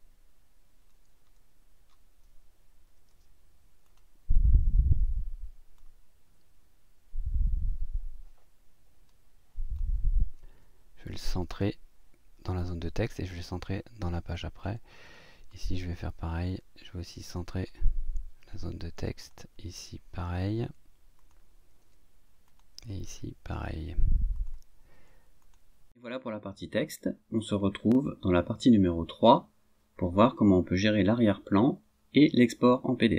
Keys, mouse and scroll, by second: 1.2 scroll down 1, 2.9 i, 3.8 click, 5.8 click, 11.4 click, 13.4 click, 15.0 click, 17.5 click, 19.2 click, 21.2 click, 22.5 click, 24.3 click, 24.8 click, 25.4 click.